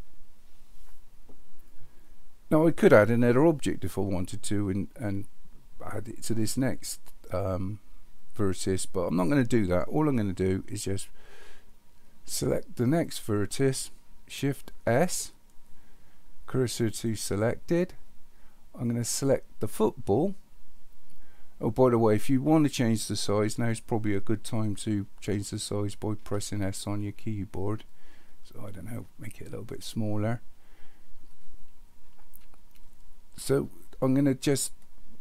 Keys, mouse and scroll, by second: 14.9 shift+s, 18.8 click, 26.2 s.